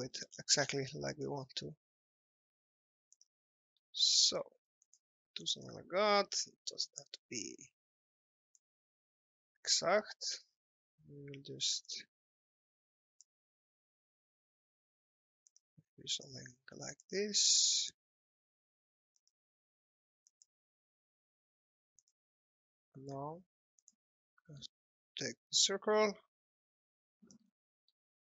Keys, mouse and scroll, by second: 0.2 scroll up 1, 0.4-0.7 scroll down 1, 3.2 click, 3.5 alt+middle click, 4.8 click, 17.2 alt+middle click, 19.2 click, 24.1 alt+middle click, 25.2 click, 27.7 alt+middle click.